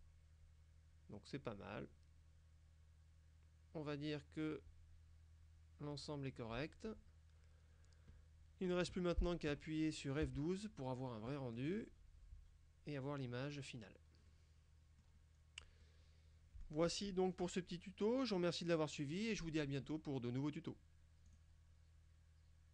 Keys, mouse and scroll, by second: 10.3 F12, 14.4-15.4 middle drag, 15.4-15.9 scroll down 2, 21.3 click.